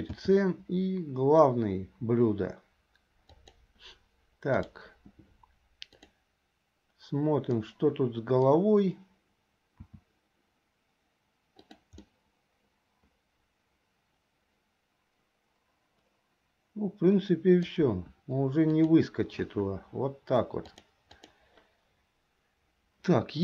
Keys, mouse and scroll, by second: 0.1 c, 6.3 click, 7.7 middle click, 9.8 s, 12.2-17.9 middle drag, 17.9 KP_1, 18.9 click, 20.7 click.